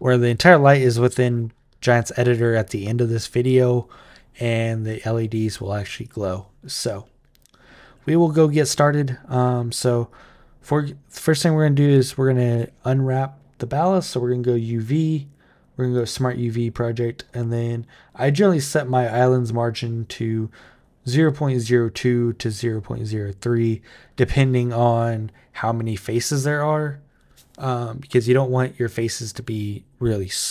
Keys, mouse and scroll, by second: 4.7 click, 5.3 click, 5.8 click, 9.8 click, 11.6 Tab, 12.3 a, 13.8 click, 15.8 click.